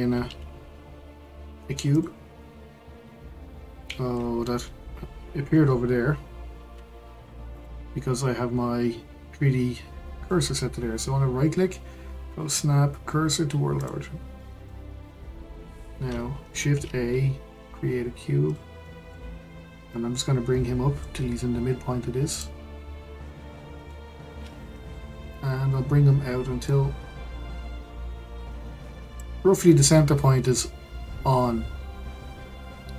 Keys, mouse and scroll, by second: 0.2 shift+a, 6.7 x, 10.3-13.4 right drag, 14.4-16.7 middle drag, 16.7 shift+a, 18.8-19.9 middle drag, 19.9 click, 22.3 drag, 22.9-23.9 scroll up 5, 23.9-25.3 shift+middle drag, 25.3 click.